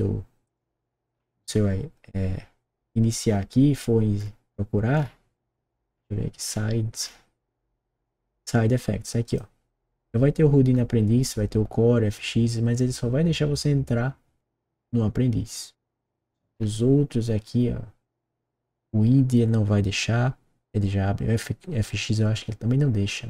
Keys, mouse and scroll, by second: 1.0-1.6 scroll down 4, 1.1 middle click, 3.2 scroll down 2, 4.2-5.1 scroll down 4, 5.9-8.3 scroll down 5, 9.2 click, 16.4 scroll down 1.